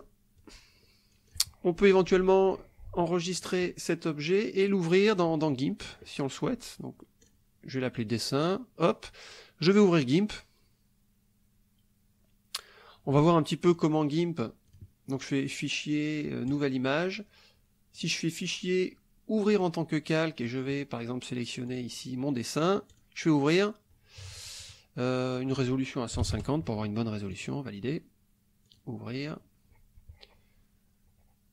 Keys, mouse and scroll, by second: 0.4-1.5 drag, 2.5 click, 3.4 click, 4.6 click, 5.9 click, 7.3 click, 8.5 click, 9.8 click, 13.7 click, 14.7 click, 16.5 click, 18.0 click, 19.4 click, 21.7 click, 22.9 click, 25.4 click, 26.2 KP_1, 26.2 KP_5, 26.3 KP_0, 27.3 click, 28.7-31.2 drag.